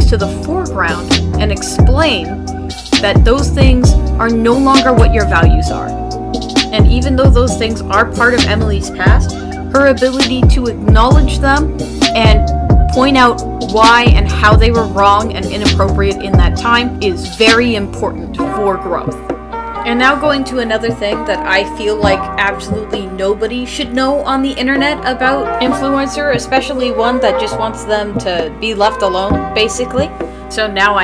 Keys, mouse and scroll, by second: 2.9 right click.